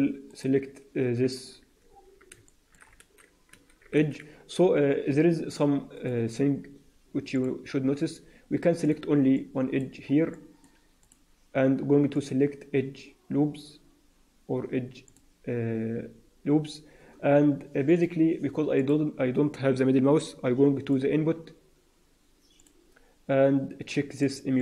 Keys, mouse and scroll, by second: 0.2 alt+right click, 1.8-2.3 scroll up 2, 2.3 shift+middle click, 2.9 alt+a, 3.4 a, 5.9 click, 7.3 click, 8.7 click, 9.3 alt+middle click, 10.2 middle click, 10.9 click, 12.1 click, 17.9 click.